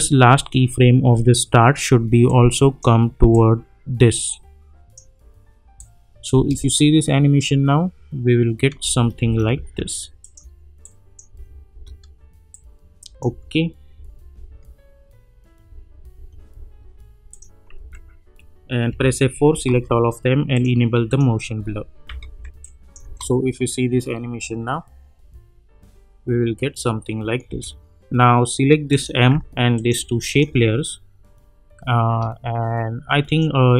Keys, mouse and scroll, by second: 2.2-2.9 drag, 6.3 space, 8.8 space, 10.2 click, 11.4 space, 12.5-13.4 click, 13.3 space, 17.3 click, 17.8 u, 19.0 F4, 19.6 ctrl+a, 20.5 click, 22.3 -, 22.6 click, 23.0 space, 27.4 space, 28.9 click, 30.8-33.6 drag, 31.5-33.7 drag.